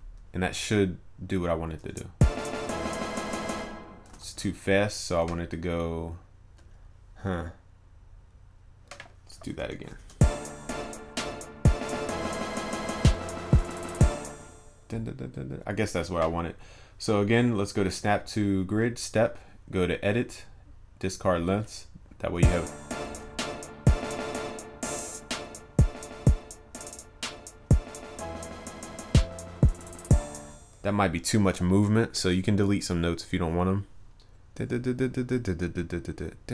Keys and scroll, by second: 4.2 ctrl+z, 9.9 ctrl+u, 23.1 ctrl+s.